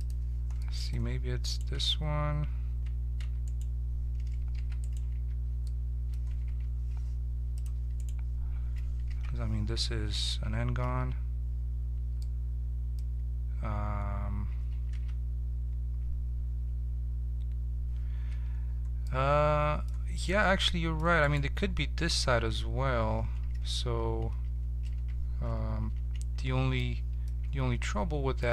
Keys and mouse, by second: 1.5 right click, 1.8 Tab, 3.2 Tab, 4.6 h, 5.2 Tab, 6.6 ctrl+Tab, 9.1 ctrl+t, 10.8 ctrl+z, 11.7-13.8 middle drag, 14.9 ctrl+Tab, 18.3 Tab, 20.2 right click, 20.4 Tab, 20.5-23.5 drag, 24.9 t, 25.8 ctrl+t, 26.8 middle click, 27.5 Tab.